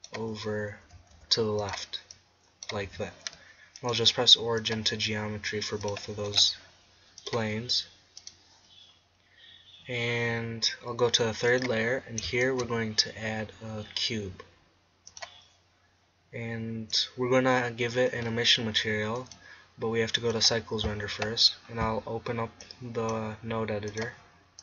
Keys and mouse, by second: 0.9 s, 1.8-3.8 drag, 2.8 Tab, 12.5 shift+a, 16.9-19.0 drag, 19.0 middle click, 19.2-20.9 drag, 20.9 click, 22.6-24.6 drag.